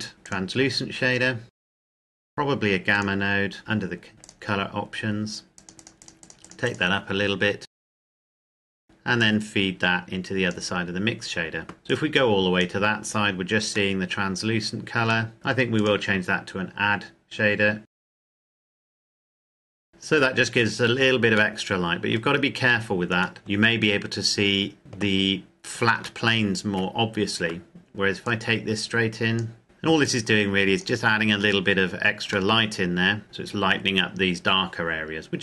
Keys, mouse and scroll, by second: 0.2 click, 4.2 click, 12.9-13.6 scroll down 2, 13.7 middle click, 15.6 click, 17.9 click, 18.7 Delete, 19.4-20.5 scroll up 3, 19.5 shift+middle click, 19.8 middle click, 21.5 middle click, 22.3-23.2 scroll down 1, 23.2 middle click, 23.4-23.9 scroll down 1, 25.7 scroll down 1, 26.0 shift+middle click, 26.6-28.1 scroll down 1, 28.1 click, 32.3 shift+middle click, 33.2 click, 35.1-35.4 scroll down 1.